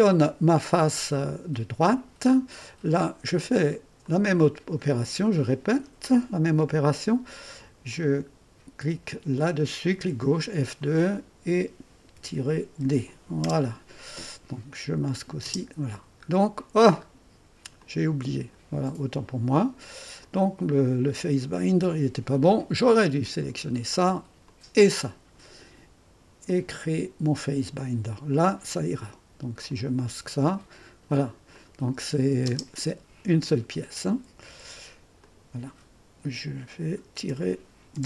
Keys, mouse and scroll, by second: 0.0-0.5 typing, 0.0 click, 1.2 click, 3.7-4.5 typing, 4.0 click, 7.9 click, 9.4 click, 10.4 F2, 10.8 click, 12.2 -, 12.8 d, 13.4 Return, 15.0 click, 15.5 typing, 15.6 click, 17.8-18.8 drag, 20.2 click, 21.5-22.2 typing, 23.2 click, 24.5 click, 26.5-29.0 drag, 29.7 click, 30.4 space, 31.5 click, 32.0 space, 32.5 space, 34.5 F2, 35.2-37.3 drag, 37.3 -, 37.9 d.